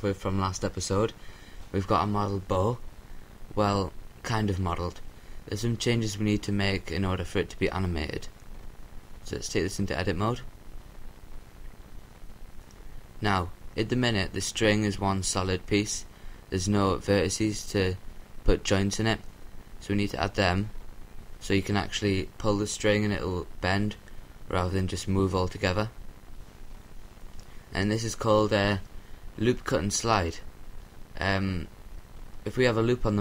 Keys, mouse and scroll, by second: 0.6-2.2 middle drag, 4.1 KP_7, 6.7-7.3 scroll up 1, 7.3-7.7 scroll up 1, 7.7 middle click, 8.6-10.1 right drag, 9.5 Tab, 11.3 a, 12.3-15.3 middle drag, 18.3-19.9 drag, 21.2 shift+s, 25.4-27.1 drag, 29.2-30.6 drag.